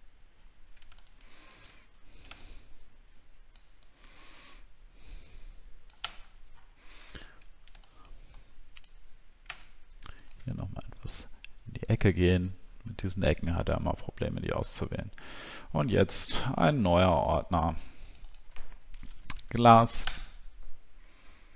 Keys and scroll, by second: 0.3 alt+scroll down 1, 1.7-2.2 alt+scroll down 8, 6.1-6.4 alt+scroll up 7, 7.1 alt+scroll up 1, 19.0 shift+g.